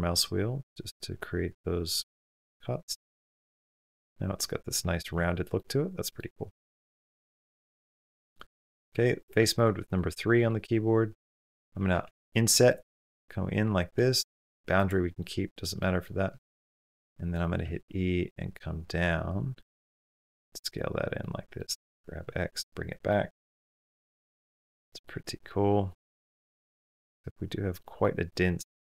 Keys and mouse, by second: 2.4 middle click, 3.0 Tab, 3.3-4.9 middle drag, 4.9 Tab, 5.3 middle click, 6.4 shift+middle click, 6.7 middle click, 8.2 middle click, 8.7 3, 10.3 click, 11.8 i, 12.7-13.8 middle drag, 15.1 middle click, 15.6 middle click, 16.3 shift+middle click, 16.6 middle click, 16.9 click, 17.4 e, 20.0 s, 21.1 click, 21.5 g, 23.0-24.3 middle drag, 24.8 shift+middle click, 26.6-27.8 middle drag, 28.0 middle click.